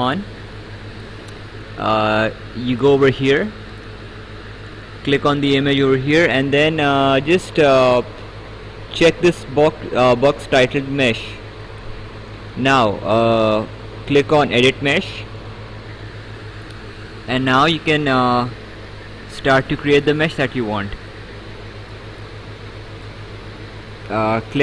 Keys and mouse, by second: 4.7 click, 11.1 click, 15.3 click, 17.3 right click.